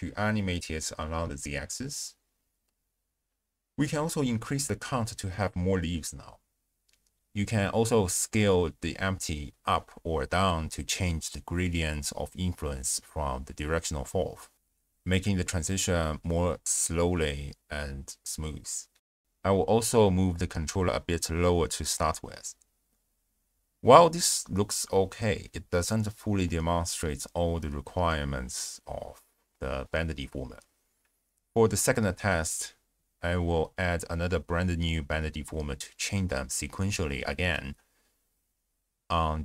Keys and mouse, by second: 0.4-3.3 typing, 0.7 click, 0.9 shift+click, 4.0 click, 5.1 shift+space, 5.7 click, 7.2 space, 8.4 shift+space, 10.0 s, 11.1 click, 11.4 space, 14.7 space, 15.3 space, 15.9 space, 16.7 shift+drag, 19.3 g, 19.5 z, 20.3 click, 21.1 i, 23.7 ctrl+alt+shift+q, 26.7 click, 29.6-30.1 drag, 30.2 g, 30.5 x, 30.8 click, 31.1 click, 31.6 ctrl+a, 34.9 click, 35.6 click, 36.3 click, 37.1 click.